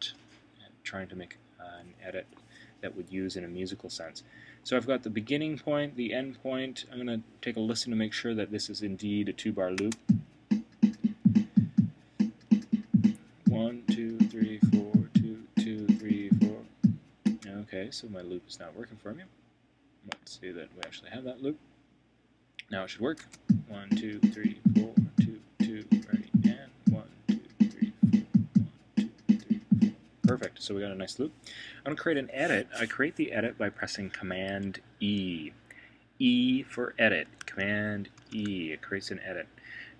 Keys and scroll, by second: 38.2 super+e.